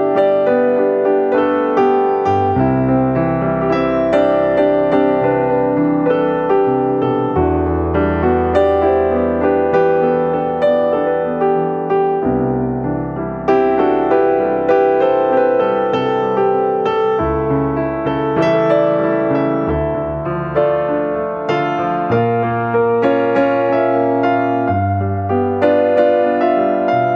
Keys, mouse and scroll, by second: 0.0 Tab, 0.1-0.8 scroll up 8, 0.6 middle click, 1.3 click, 4.6 middle click, 5.0-5.7 scroll down 8, 5.4 middle click, 6.6 click, 7.9 e, 10.0 g, 11.1 g, 12.2 e, 13.3 r, 14.1 g, 15.3 g, 16.6 s, 18.8 r, 19.7 g, 22.5 r, 23.3 g, 24.3 r, 26.3 Tab, 26.5 middle click.